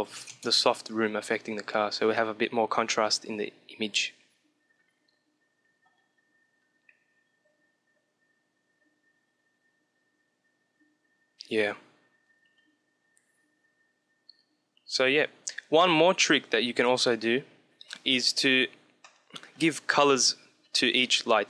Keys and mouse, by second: 15.4 middle click, 15.9-17.9 drag, 18.9 middle click, 20.7-21.4 drag, 21.3-21.4 middle drag.